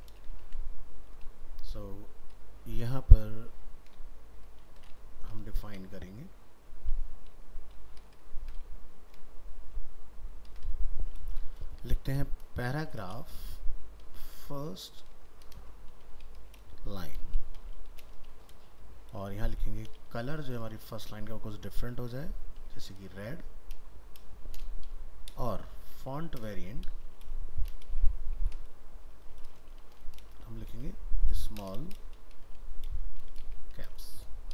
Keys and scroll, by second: 0.5 ctrl+s.